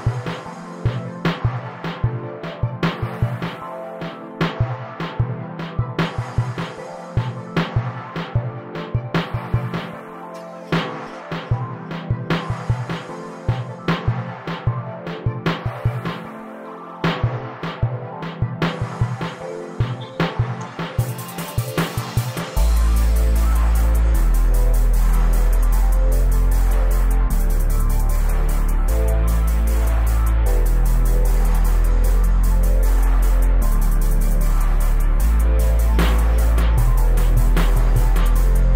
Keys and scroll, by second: 1.7 space, 3.3 m, 5.9 Escape, 6.1 space, 7.8 super+g, 9.1 m, 14.0 space, 14.6 Escape, 18.4 o, 20.3 space, 21.0 c, 24.6 space, 25.8 f, 28.4 space, 29.7 BackSpace, 31.9 p, 34.7 space, 36.8 super+g.